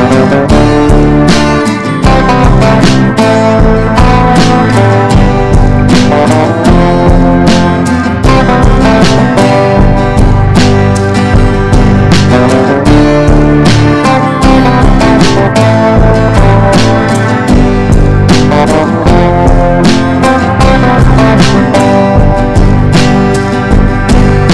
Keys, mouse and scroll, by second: 1.8 click, 3.2-16.4 drag, 19.0 click, 20.1 ctrl+g, 21.1-24.5 ctrl+shift+drag.